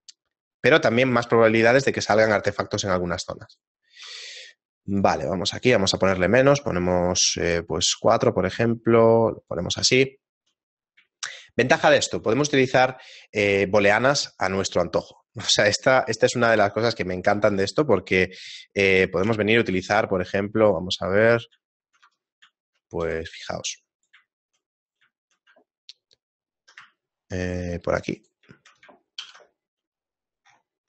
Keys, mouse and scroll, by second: 0.2 shift+middle click, 3.5 right click, 4.1 q, 10.1 shift+middle click, 10.7 middle click, 11.2 shift+middle click, 15.6 shift+middle click, 16.6 shift+middle click, 19.2 KP_7, 19.7 shift+a, 21.0 middle click, 21.7 shift+middle click, 22.6 Tab, 22.6 shift+middle click, 23.6 e, 24.3 shift+middle click, 24.8 right click, 25.2 shift+middle click, 27.0 shift+middle click, 28.2 right click, 28.5 shift+middle click, 29.2 ctrl+b.